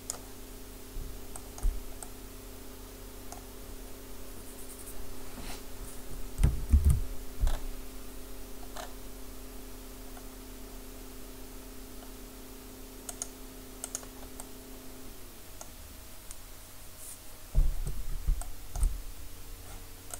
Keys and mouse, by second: 1.4-3.2 middle drag, 6.7 ctrl+r, 14.0-19.2 drag, 19.2 middle click.